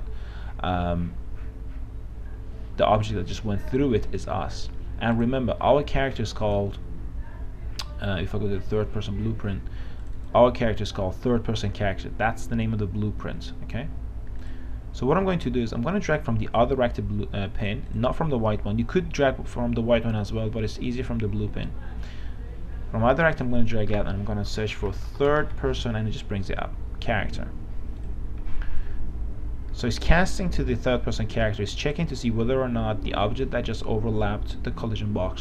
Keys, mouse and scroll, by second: 5.4-24.1 drag, 24.7-26.3 typing, 28.2-31.2 drag.